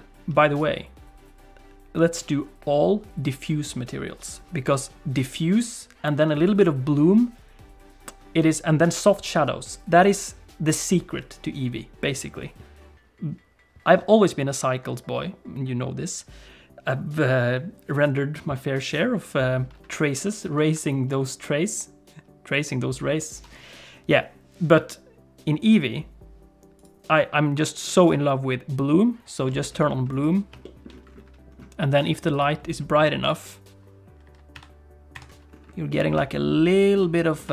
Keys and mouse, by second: 30.1 click, 30.7 shift+middle click, 32.4-35.2 drag, 36.0 middle click, 36.4 shift+middle click.